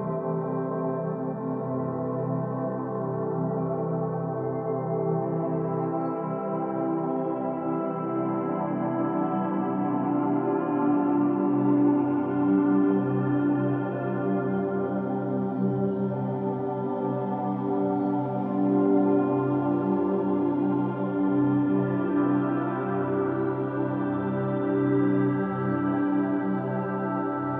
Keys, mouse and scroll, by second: 7.6 middle click, 8.5 Tab, 9.2-9.8 scroll down 1, 9.8-12.8 middle drag, 13.0 Tab, 14.4-17.4 drag, 19.8 Tab, 20.4-23.5 middle drag, 26.5-27.5 drag.